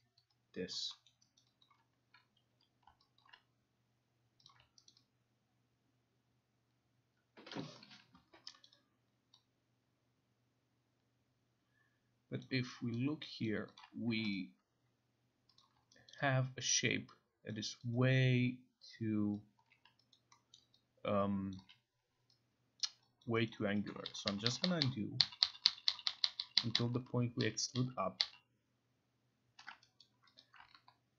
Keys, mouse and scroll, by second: 0.0 click, 0.2 alt+right click, 0.7 alt+click, 1.1 alt+middle click, 1.4 alt+right click, 1.7 alt+click, 2.5 q, 3.2 alt+click, 4.5 click, 4.9 alt+right click, 7.6 alt+click, 8.6 alt+right click, 12.4 alt+click, 14.1 ctrl+a, 14.3 right click, 15.6 click, 16.1 alt+right click, 17.5 alt+click, 19.3 alt+click, 20.1 alt+click, 20.5 alt+middle click, 21.5 alt+click, 22.8 alt+click, 23.2 alt+click, 23.5 alt+right click, 24.1 ctrl+z, 24.3 ctrl+z, 24.5 ctrl+z, 24.8 ctrl+z, 25.2 ctrl+z, 25.5 ctrl+z, 25.7 ctrl+z, 25.9 ctrl+z, 26.1 ctrl+z, 26.2 ctrl+z, 26.4 ctrl+z, 26.6 ctrl+z, 26.7 ctrl+z, 26.9 ctrl+z, 27.4 ctrl+z, 27.7 ctrl+z, 28.2 ctrl+z, 30.0 alt+right click, 30.4 alt+click.